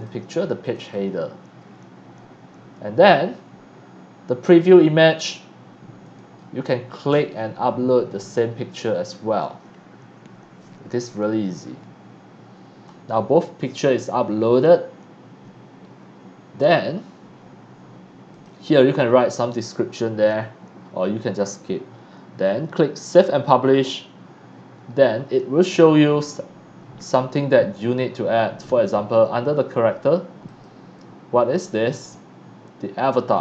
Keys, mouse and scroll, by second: 0.6 click, 1.6 scroll down 1, 3.0 scroll up 1, 6.1 click, 7.2 click, 8.8 click, 9.0 click, 11.0 scroll up 1, 18.3 click, 21.8-22.5 scroll down 1, 23.1 click, 24.2-25.2 scroll down 1, 30.4 click, 33.3 click.